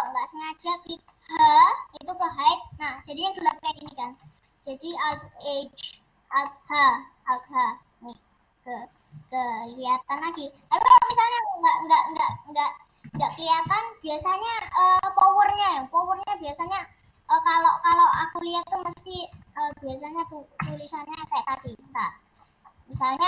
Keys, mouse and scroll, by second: 0.0-1.3 middle drag, 1.3 h, 2.0 middle click, 2.3-2.9 scroll up 5, 2.9 middle click, 3.3-3.7 scroll down 2, 3.7-5.3 middle drag, 5.3 alt+h, 6.6 middle click, 6.7-7.3 scroll down 4, 7.3-7.7 scroll up 4, 8.9 click, 9.2-9.9 scroll up 3, 9.9 scroll up 3, 10.2-13.2 middle drag, 16.0-20.6 drag, 21.4-22.4 scroll down 7, 22.4-22.7 scroll up 8.